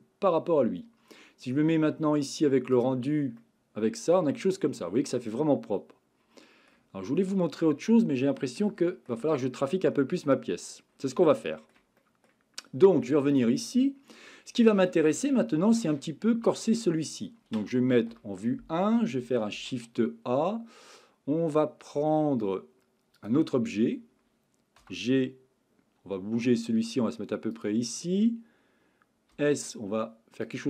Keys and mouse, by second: 2.8 click, 3.4-6.7 middle drag, 7.2-8.3 middle drag, 8.7-9.1 shift+middle drag, 9.4-10.6 middle drag, 11.2-11.7 shift+middle drag, 12.0 middle click, 13.3 click, 15.2-15.7 shift+middle drag, 16.0 middle click, 18.1 KP_1, 19.6 shift+a, 24.8 g, 27.5 click, 29.3 s, 30.4 click.